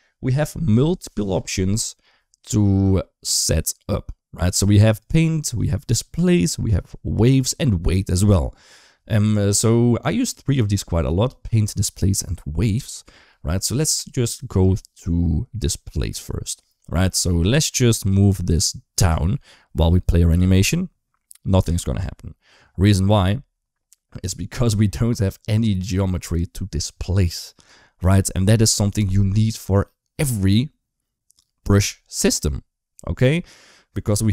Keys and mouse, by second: 4.7-13.4 drag, 14.5-16.0 drag, 18.7 space, 20.1 g, 21.4 space.